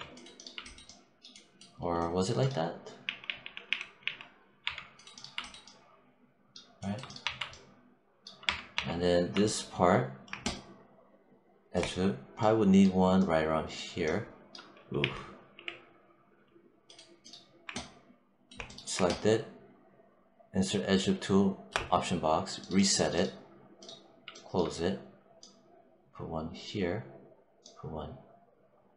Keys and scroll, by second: 14.8 z, 15.4 w.